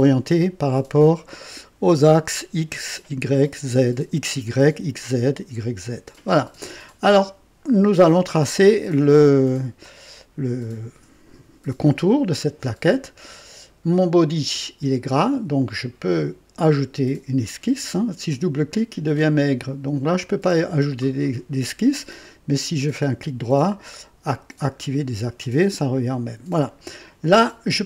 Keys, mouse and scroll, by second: 18.3 click, 19.2 click, 20.2 click, 22.7 right click, 24.6 click.